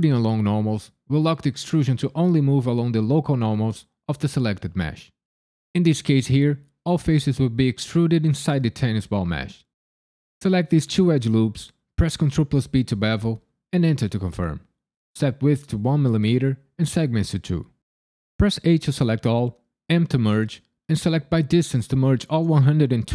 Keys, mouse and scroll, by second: 8.9 alt+click, 10.2 alt+shift+click, 12.2 ctrl+b, 13.7 KP_Enter, 15.0 click, 18.6 a, 19.9 m.